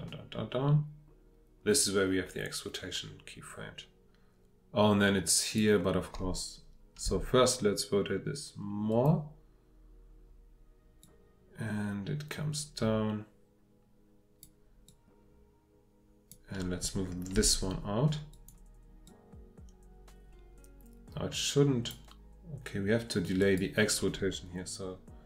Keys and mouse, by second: 7.0 r, 17.3 g, 19.5-25.2 drag.